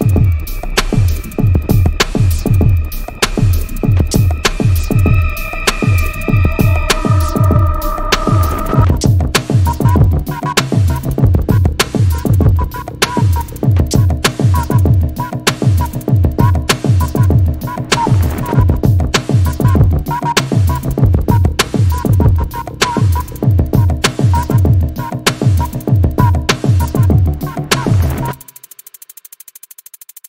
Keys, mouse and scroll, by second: 1.4 click, 3.1 ctrl+m, 3.6 click, 6.0 click, 7.1-8.8 drag, 9.6 click, 10.4 click, 11.6-15.0 alt+drag, 16.3 click, 16.7-19.3 alt+drag, 20.7-21.2 scroll down 1, 21.2-21.7 scroll up 2, 21.4 click, 22.2 scroll down 1, 24.0 0, 25.6-27.0 drag, 30.0-30.2 drag.